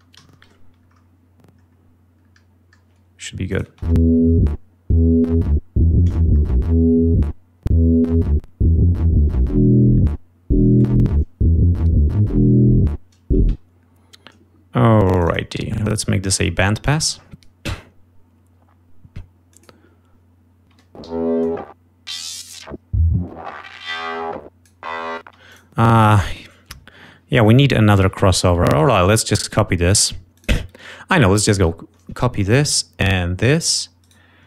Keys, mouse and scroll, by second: 0.4 F1, 3.6 click, 3.8 space, 10.1 ctrl+scroll down 2, 13.4 space, 15.1 click, 16.7 click, 19.3 click, 20.9 space, 21.5 l, 21.8-25.2 drag, 25.6 space, 25.9 click, 29.0 right click, 30.6 click, 31.7 ctrl+click, 32.9 ctrl+click, 34.2 ctrl+right click.